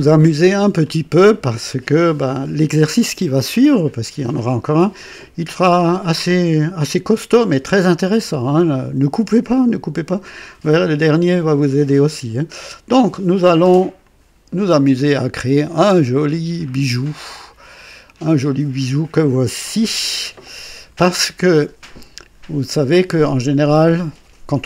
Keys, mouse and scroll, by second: 0.1 scroll up 1, 0.9 right click, 14.0 click, 15.2-19.7 drag, 21.2-23.4 drag.